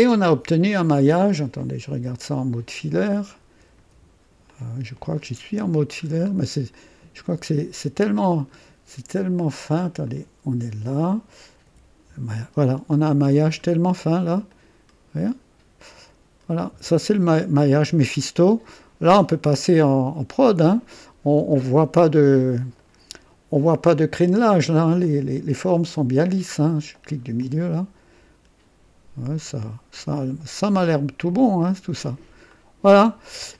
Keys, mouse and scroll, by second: 1.9 a, 2.7-3.3 scroll up 2, 3.8 typing, 4.5-5.9 drag, 6.0-6.4 scroll up 1, 6.7-7.4 typing, 6.7-8.7 drag, 10.0-11.6 typing, 10.0 click, 12.4-13.1 scroll down 2, 13.1 scroll up 1, 13.7-19.5 typing, 13.9 click, 14.5-22.7 drag, 21.8-24.1 typing, 22.8 right click, 23.6-24.0 scroll up 1, 24.3 right click, 25.0-26.4 drag, 26.9 middle click, 27.4-32.3 drag, 27.8-28.5 typing, 32.4-33.5 typing, 32.5 click.